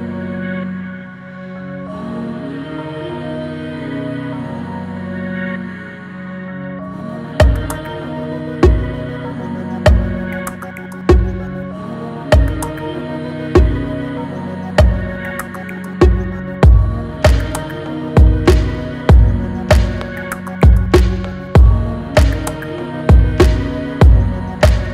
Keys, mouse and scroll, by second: 7.2 click, 8.8 Down, 10.8-11.5 typing, 11.0-15.6 drag, 15.4-16.1 typing, 15.6 click, 18.5 right click, 20.8-24.8 drag, 24.8-24.9 drag.